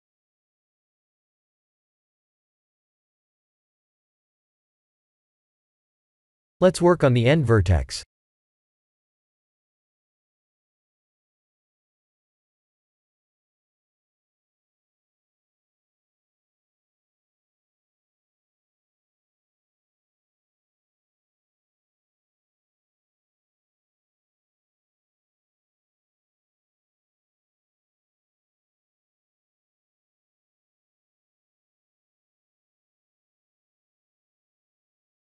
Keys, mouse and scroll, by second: 0.2 Tab, 0.6-0.9 middle drag, 1.0 shift+z, 1.5-3.5 middle drag, 3.7-4.6 scroll up 3, 5.3 shift+middle click, 6.2 shift+middle click, 6.9-7.2 scroll up 3, 7.2 Tab, 7.6 shift+middle click, 9.0 1, 9.4 click, 11.0 g, 12.4 ctrl+z, 13.9 click, 14.3 shift+z, 14.8 b, 17.1 g, 19.5 Tab, 20.0 shift+z, 21.9 Tab, 22.8 g, 25.5 Tab, 26.3-28.4 middle drag, 28.7-29.8 scroll down 7, 29.9-30.4 shift+middle drag, 30.7-31.4 middle drag, 31.7-32.4 shift+middle drag, 32.7-33.0 scroll up 3, 33.6-34.1 middle drag, 34.6 Tab.